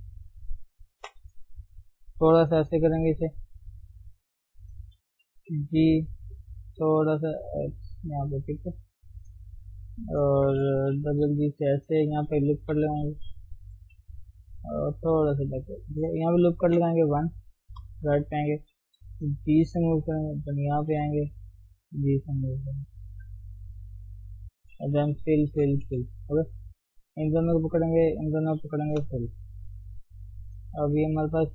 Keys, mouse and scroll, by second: 1.0 alt+shift+click, 1.5 g, 2.5 middle click, 3.5 scroll up 1, 4.0 click, 4.2-5.4 middle drag, 5.4 g, 8.6 click, 8.9-10.3 middle drag, 10.3 alt+shift+click, 11.0 g, 12.5 ctrl+r, 13.9 g, 15.3-16.5 shift+middle drag, 16.5 ctrl+r, 17.8 KP_3, 18.9 g, 20.7 ctrl+r, 21.7 g, 23.5 click, 24.2 middle click, 24.7-25.1 scroll down 1, 25.1 scroll up 1, 25.2 f, 25.5 f, 25.9 f, 26.9 click, 27.8 shift+click, 28.1 shift+click, 29.0 f, 30.3 click, 31.4 shift+click.